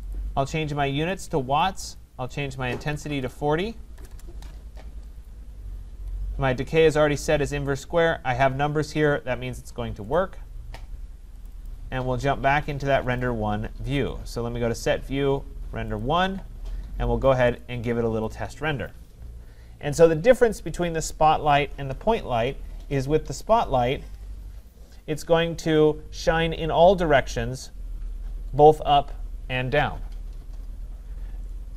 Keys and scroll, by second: 3.9 BackSpace.